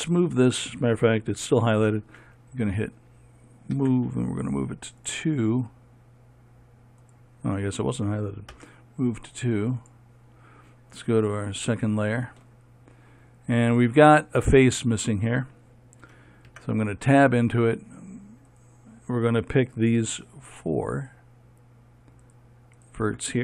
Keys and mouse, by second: 7.6-10.4 drag, 17.0 Tab, 19.0-23.4 drag.